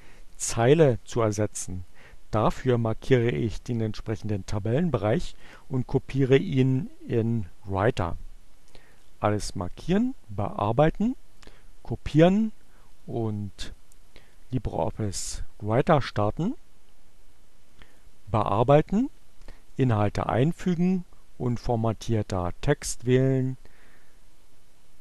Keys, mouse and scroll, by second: 12.6 click, 13.6 click, 15.5 click, 16.6 click, 18.5 click, 20.1 click, 21.3 click, 22.7 click.